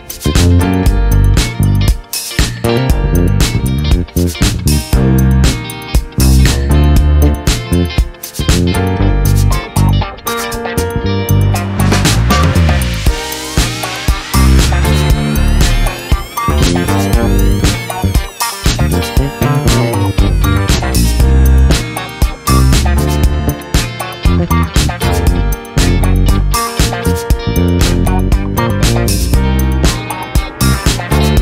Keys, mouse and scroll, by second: 1.4 shift+click, 2.7 ctrl+d, 4.6 shift+click, 5.9 click, 7.8 KP_1, 8.0 KP_2, 8.3 KP_Enter, 13.7 click, 15.3 click, 17.4 click, 19.0 shift+click, 21.9 click, 23.0 KP_6, 23.2 KP_Enter, 24.6 click, 26.3 click, 27.8 click, 30.6 d.